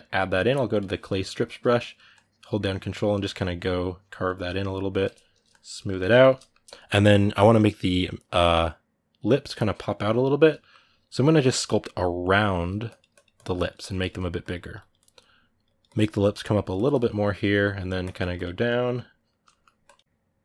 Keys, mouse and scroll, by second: 0.5 click, 0.8 ctrl+middle click, 1.5-2.9 ctrl+drag, 2.9 ctrl+middle click, 3.1-5.5 ctrl+drag, 5.5-11.1 ctrl+middle drag, 11.1 click, 12.0 ctrl+middle click, 12.6-19.0 drag, 19.0 ctrl+middle click, 19.6 click, 20.0 right click.